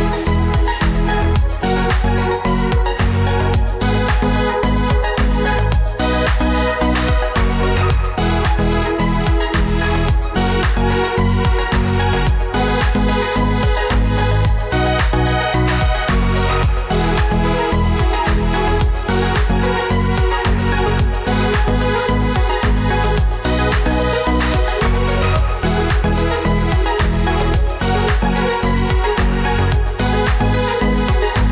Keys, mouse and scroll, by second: 11.6 right click, 17.4 right click, 19.9 Right, 20.1 ctrl+t.